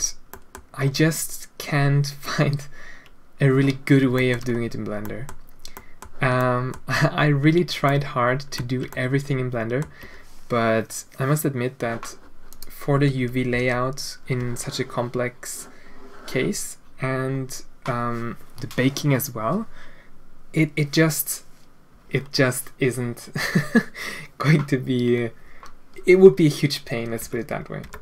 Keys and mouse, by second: 0.3 middle drag, 4.2 shift+middle drag, 5.0 middle click, 5.7 middle click, 6.4 shift+middle click, 7.9 ctrl+middle click, 8.9-9.8 ctrl+middle drag, 13.1 Tab, 13.5 a, 14.4 Tab, 27.2 Tab, 27.8 Tab.